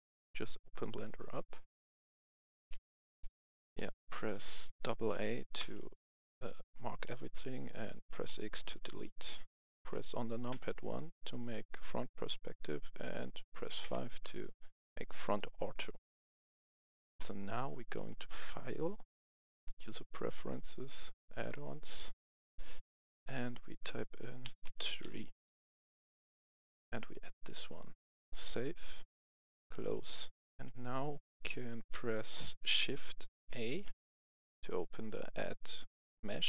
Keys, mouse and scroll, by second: 1.8 F11, 2.4 F10, 3.1 middle click, 4.1 a, 4.9 a, 5.5 x, 6.1 click, 6.9 middle click, 10.4 KP_1, 13.7 KP_5, 17.8-24.3 drag, 24.5 click, 24.5-24.9 typing, 25.7 click, 30.3 F10.